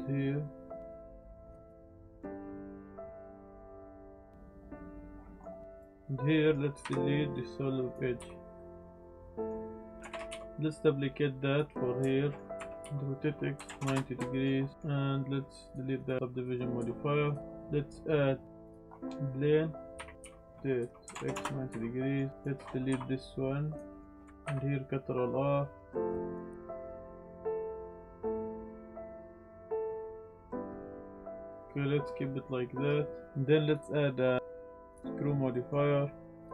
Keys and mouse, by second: 1.5 click, 1.6 click, 1.8-3.4 typing, 2.1 click, 2.2 Tab, 2.3 drag, 2.9 click, 3.8 click, 4.0 Tab, 4.2-5.4 drag, 5.6 click, 5.6 z, 6.3 middle click, 6.8 Delete, 8.1 z, 8.5 click, 10.1 shift+d, 10.3 x, 11.5 click, 11.9-12.3 shift+middle drag, 12.6 r, 12.8 x, 13.5 KP_9, 13.6 KP_0, 13.8 KP_Enter, 14.4 shift+middle drag, 14.7 middle click, 15.6 click, 16.0 click, 16.8 Tab, 17.4 g, 17.4 z, 17.4 shift+a, 20.1-21.1 typing, 21.3 KP_Enter, 21.7 Tab, 22.0 click, 22.3 1, 22.3 click, 22.9 Delete, 23.9 click, 24.4 ctrl+r, 26.5 g, 26.5 x, 27.3 click, 27.5 click, 28.0-30.6 typing, 28.5 click, 28.8 click, 29.0 click, 29.5 click, 31.0 click, 31.3 Tab, 31.4-32.4 drag, 33.6-34.9 drag, 35.5 middle drag.